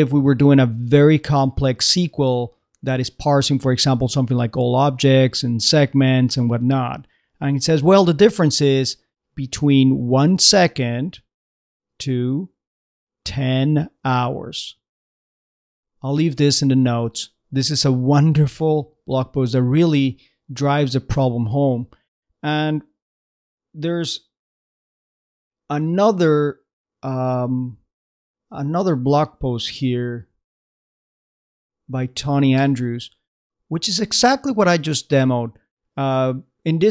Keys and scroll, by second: 24.8 alt+super+v, 29.8 alt+super+v, 30.3 alt+super+Down.